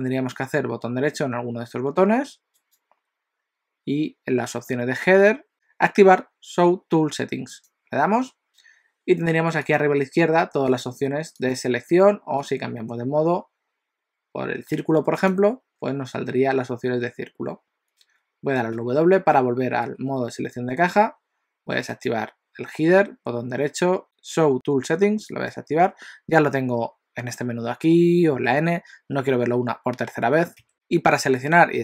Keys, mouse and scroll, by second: 2.5 right click, 9.8 click, 10.7 click, 11.4 click, 12.5 click, 18.8 w, 19.4 w, 21.9 right click, 28.4 n, 30.7 n.